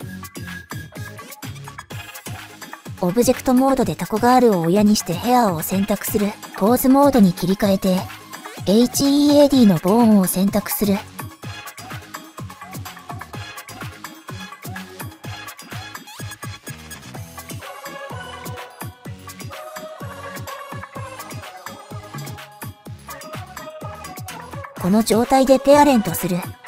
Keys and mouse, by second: 1.8 click, 2.5 shift+click, 2.7 shift+click, 5.7 shift+click, 9.1 shift+click, 10.8-11.9 drag, 18.5 shift+click, 21.1 click, 21.5-22.9 middle drag, 23.6 shift+click, 24.3-26.3 middle drag.